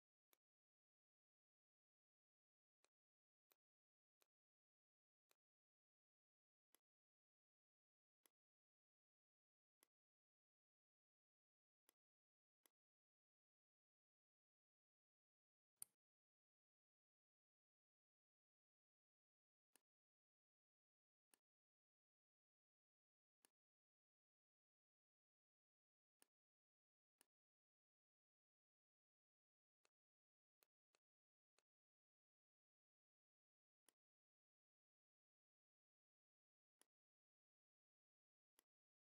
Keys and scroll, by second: 18.1 ctrl+z, 30.4 z, 30.8 space, 31.3 v, 35.4 m, 38.1 v.